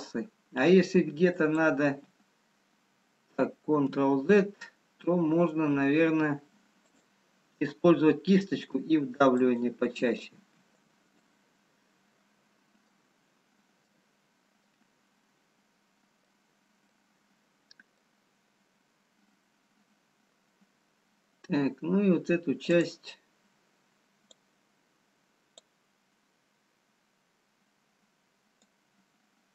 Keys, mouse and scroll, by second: 1.6 ctrl+click, 3.9 ctrl+z, 7.1 click, 11.0 ctrl+click, 11.0 right click, 13.1 middle click, 14.7 middle click, 14.7-15.3 scroll up 2, 17.2 middle click, 18.9 scroll down 1, 19.9-20.3 scroll down 1, 23.3 click, 24.6 click, 28.7 click.